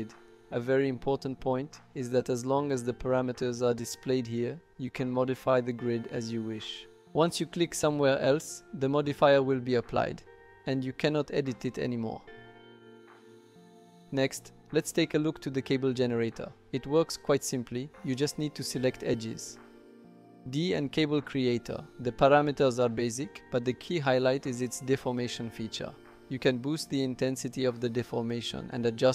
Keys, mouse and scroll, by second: 2.3 typing, 3.4-4.4 drag, 6.6 click, 14.5 middle click, 14.9 click, 15.1 typing, 15.1 middle click, 15.4 shift+middle click, 16.7 click, 17.8 ctrl+click, 18.1 typing, 18.4 ctrl+click, 19.1 ctrl+click, 19.3 typing, 19.4 middle click, 19.8 click, 24.3-25.4 drag, 26.5-29.1 drag.